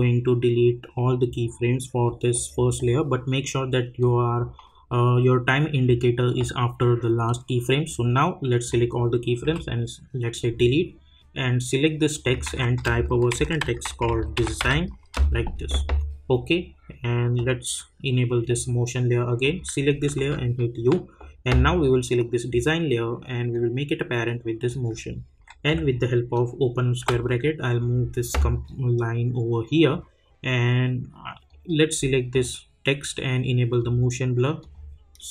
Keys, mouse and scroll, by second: 2.3-7.1 drag, 7.8-12.1 drag, 12.4 ctrl+a, 13.1-15.1 typing, 16.0 click, 18.4 click, 20.1 u, 21.7-27.0 drag, 27.0 [, 30.2-31.7 drag.